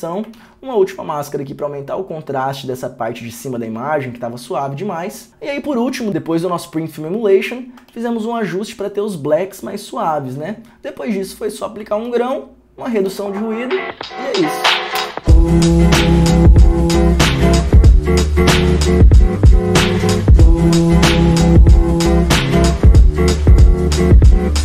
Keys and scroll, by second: 15.2 space.